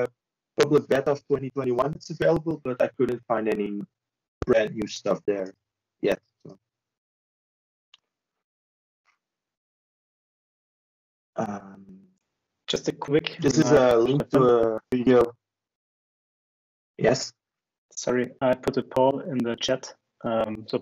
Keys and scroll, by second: 0.6 Right, 1.8 shift+Return, 3.3 c, 3.8 shift+Return, 4.6 d, 5.6 shift+Return, 6.7 e.